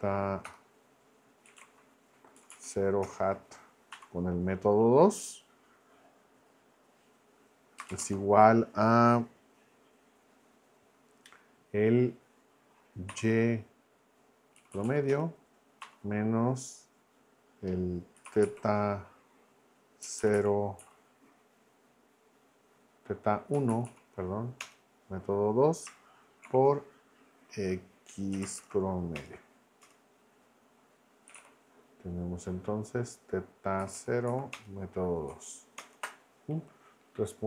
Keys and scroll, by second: 0.0-2.1 typing, 2.3 Down, 3.0 Return, 3.9 2, 7.8 space, 7.9 =, 8.0 space, 13.1 y, 14.6 Down, 15.1 Return, 15.8 -, 17.9-18.9 typing, 20.0 Down, 20.8 Up, 23.5 Down, 24.6 Return, 26.4 shift+8, 28.1-29.1 typing, 29.1 Return, 31.0-31.8 typing, 33.8 Down, 34.5 Return, 35.8 ctrl+Return.